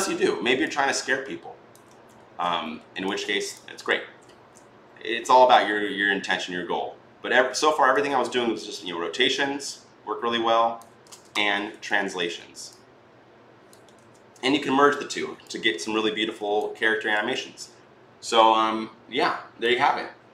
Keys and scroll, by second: 1.9 ctrl+z, 5.7 e, 6.2 r, 11.2 ctrl+z, 11.2-12.5 typing, 13.8 ctrl+z.